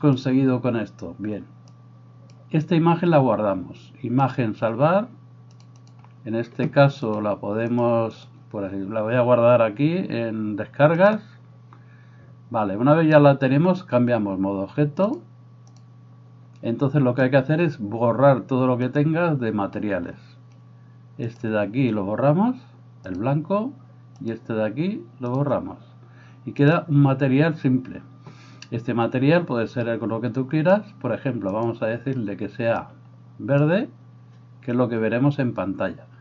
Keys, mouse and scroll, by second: 2.1-5.8 middle drag, 9.3 middle click, 19.0-21.3 middle drag, 21.3 click, 21.7-23.2 middle drag, 23.2-24.3 drag, 24.3-25.3 middle drag, 25.3-26.7 drag, 26.7-30.5 middle drag, 30.5-31.7 drag, 31.7-36.2 middle drag.